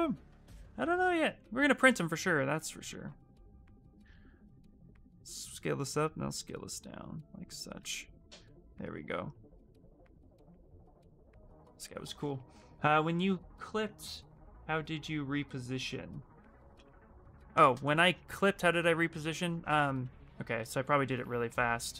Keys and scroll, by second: 3.0 w, 11.8 q, 19.4 f, 19.8 f, 20.5 f.